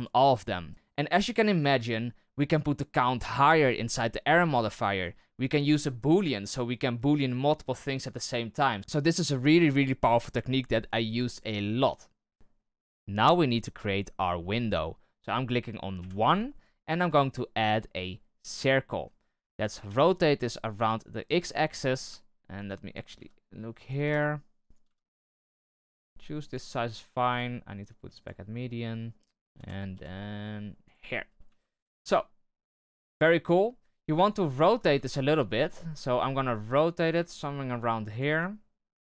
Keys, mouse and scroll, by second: 12.3-15.4 middle drag, 15.9 KP_1, 16.8 shift+a, 19.6 r, 22.0 z, 23.1 s, 27.3-28.6 drag, 28.6-29.5 middle drag, 29.5 g, 31.4 KP_3, 31.9 z, 34.5 shift+middle drag, 34.7 z, 35.1-35.5 scroll up 5, 35.6-36.2 shift+middle drag, 36.2 r, 37.1 g, 38.2 r.